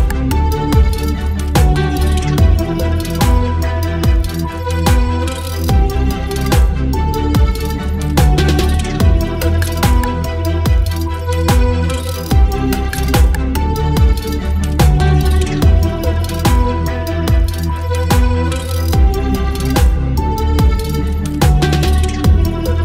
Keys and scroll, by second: 3.0 ctrl+BackSpace, 6.6 ctrl+BackSpace, 9.6 ctrl+BackSpace, 11.2 space, 14.3 space, 15.9 Down, 16.1 Down, 16.2 Down, 16.4 Down, 16.6 Left, 17.0 Down, 17.2 Down, 17.3 Down.